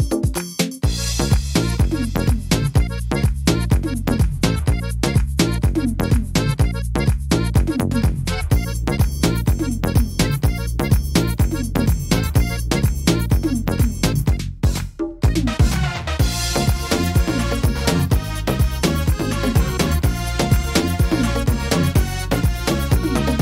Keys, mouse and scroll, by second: 0.4 right click, 0.7 shift+right click, 1.9 shift+right click, 2.6 shift+right click, 3.6 shift+right click, 4.2 shift+right click, 4.8 shift+right click, 5.4 shift+right click, 7.1 middle click, 7.7 shift+middle click, 8.8 shift+right click, 9.2 shift+right click, 10.0 shift+right click, 10.4 shift+right click, 11.1 shift+right click, 11.4 shift+right click, 12.4 shift+right click, 12.7 shift+right click, 13.8 shift+right click, 14.1 shift+right click, 14.8 shift+right click, 16.3 shift+right click, 16.5 middle click, 17.0 scroll down 1, 17.4 middle click, 18.8 e, 19.6 s, 22.2 click, 22.2 s.